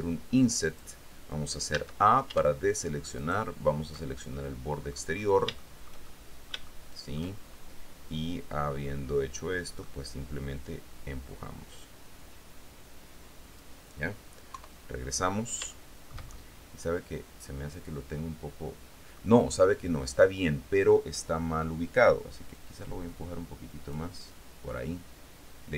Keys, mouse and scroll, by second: 0.8 click, 1.9 a, 3.4 alt+shift+right click, 4.5 alt+shift+middle click, 5.8-7.5 shift+middle drag, 8.9-10.2 middle drag, 11.0-13.9 drag, 14.7 KP_3, 15.9 shift+middle click, 16.8-19.6 middle drag, 22.7-24.3 drag.